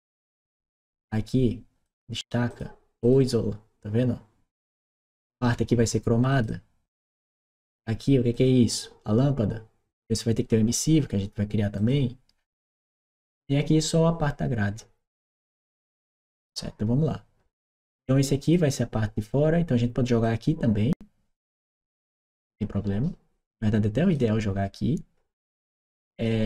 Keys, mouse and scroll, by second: 1.7 click, 2.3 click, 2.8 click, 6.1 click, 8.1 click, 11.6 click, 12.4-15.1 drag, 18.2 click, 20.0 click, 21.0 click, 23.6 click, 25.1-26.4 drag.